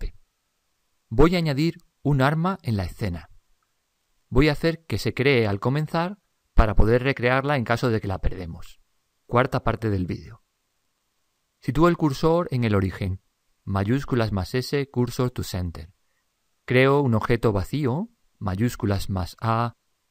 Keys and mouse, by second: 13.5 shift+s, 19.4 shift+a.